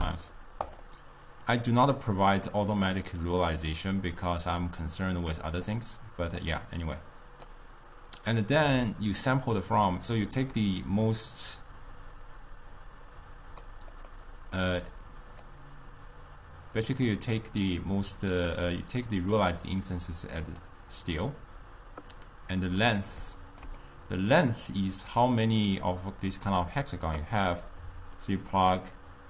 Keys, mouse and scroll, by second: 1.6-2.6 drag, 5.2 click, 5.7-6.9 middle drag, 6.9 click, 11.3 click, 14.1-15.1 middle drag, 15.1 click, 19.3 click, 19.7 click, 20.2-22.3 drag, 22.3-26.9 middle drag, 28.3 click.